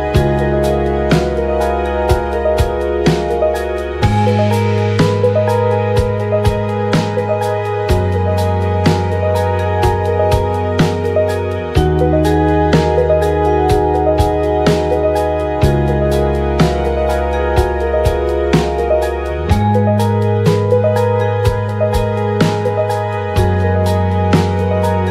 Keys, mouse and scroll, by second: 0.1 shift+z, 1.9 click, 1.9-7.4 right drag, 1.9 f, 2.5-3.8 drag, 3.6 f, 4.1-7.4 drag, 11.4-13.4 drag, 11.4-13.4 right drag, 18.3 right click, 19.0 KP_1, 19.7-21.4 right drag, 20.1-22.1 drag, 22.1 right click, 22.9 click, 23.8 click, 24.0 ctrl+a, 24.2 KP_1, 24.8-25.1 drag.